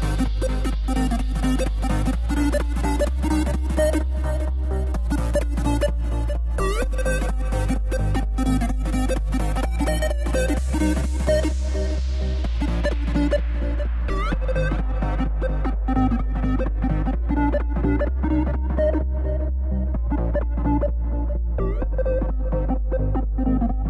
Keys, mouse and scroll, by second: 1.3 s, 3.0 Tab, 3.2 z, 3.7 click, 4.0 scroll down 5, 4.2-6.0 middle drag, 6.0-8.5 scroll down 15, 8.5-9.8 middle drag, 9.8 click, 10.5 KP_1, 11.0-11.4 scroll up 7, 11.4-12.7 middle drag, 12.7-13.1 scroll up 1, 13.1-14.9 middle drag, 14.9 click, 16.1 KP_1, 16.6-17.4 scroll down 8, 17.4-20.1 shift+middle drag.